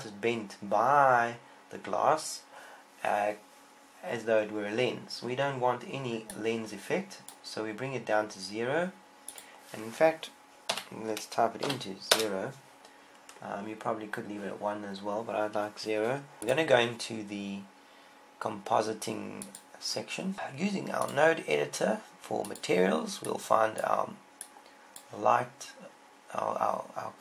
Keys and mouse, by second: 17.3-19.1 drag, 21.8-27.2 drag.